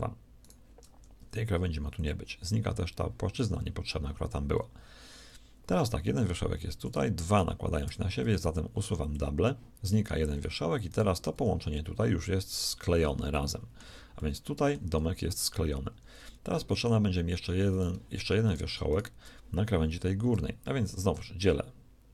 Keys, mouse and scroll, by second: 0.8 x, 6.7 a, 6.9 a, 7.9 w, 11.2 g, 13.7 z, 15.2 g, 21.0 w.